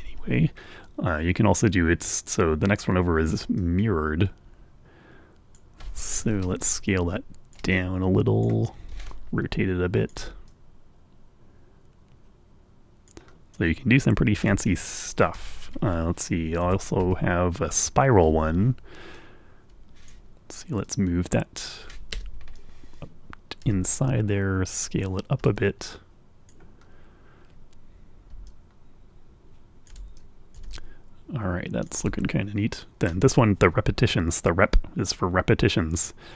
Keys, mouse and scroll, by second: 0.2 Right, 3.9-6.1 drag, 6.5-8.9 ctrl+right drag, 9.4-10.6 ctrl+shift+right drag, 10.8 right click, 10.8-13.5 drag, 16.9 Left, 19.4-20.6 drag, 21.1 click, 22.4 Escape, 22.8-26.9 drag, 28.7-30.3 ctrl+drag, 30.4-32.2 drag, 35.3-36.3 drag.